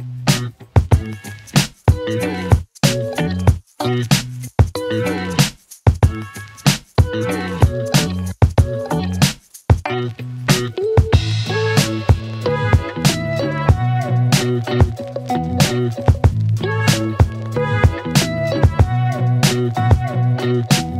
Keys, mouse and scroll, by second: 0.2-0.6 scroll up 1, 0.9 click, 1.7 right click, 3.9 click, 6.3 click, 10.0 ctrl+v, 14.9 click, 16.4-17.2 click, 19.7 click.